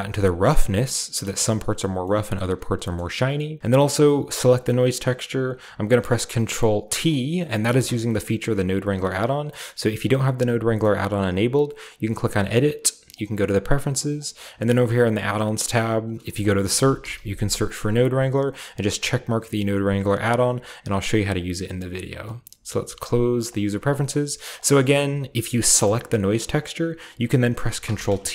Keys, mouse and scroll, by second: 1.0-1.3 shift+middle drag, 1.3 typing, 1.4-2.0 scroll up 2, 3.3-4.1 typing, 3.6 middle click, 3.9 click, 4.5 click, 6.9 ctrl+middle click, 7.6 typing, 7.7 ctrl+t, 11.8 click, 13.1 click, 14.2 click, 15.1 click, 16.0 click, 16.6-17.1 typing, 17.6 drag, 18.6 click, 23.4 click, 24.5 drag, 25.0-27.8 drag, 25.0 x, 27.8 ctrl+t.